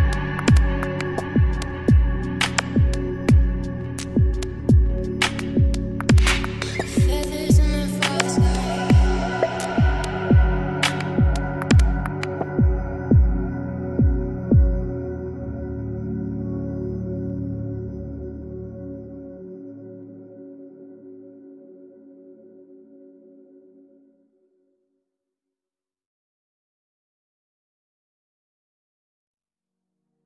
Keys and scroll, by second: 2.2-3.5 typing, 9.8 ctrl+s, 18.6-21.5 typing, 23.9-26.6 typing, 29.1 b, 30.1 n.